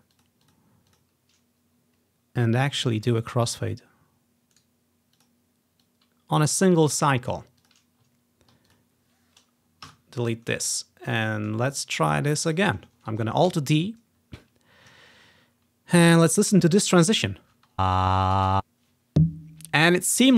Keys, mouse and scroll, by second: 0.3-2.1 drag, 2.6 middle click, 2.8 typing, 3.4-4.3 ctrl+scroll down 1, 4.7 click, 5.3-10.0 drag, 5.4 middle click, 5.4 right click, 8.3-9.4 ctrl+scroll down 1, 9.5 typing, 10.0 Delete, 10.6-10.9 scroll up 1, 10.9-11.3 ctrl+scroll down 1, 11.0-11.8 typing, 12.5-13.7 drag, 13.0 ctrl+scroll down 1, 13.6 alt+d, 14.3-15.0 ctrl+scroll up 1, 15.1-15.6 ctrl+scroll down 1, 15.6 ctrl+scroll up 2, 16.4 typing, 17.3-18.7 drag, 17.7-18.5 typing, 19.6 s, 20.2 alt+d.